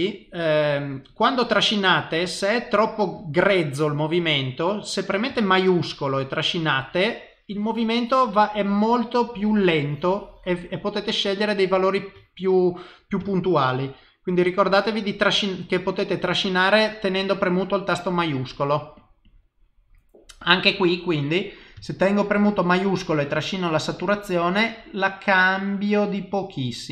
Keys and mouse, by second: 20.8 click.